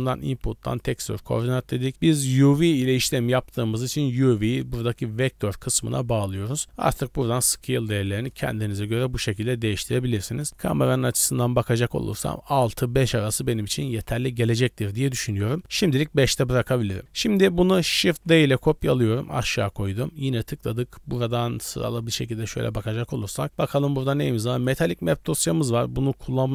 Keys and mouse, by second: 4.0-6.5 drag, 7.2-8.3 drag, 9.2 middle drag, 9.8 middle click, 10.3 KP_0, 10.9 shift+middle drag, 13.1 click, 15.6 click, 16.0 click, 16.6 click, 17.0 click, 17.2 click, 18.1 shift+d, 19.5 click, 25.7-26.5 drag.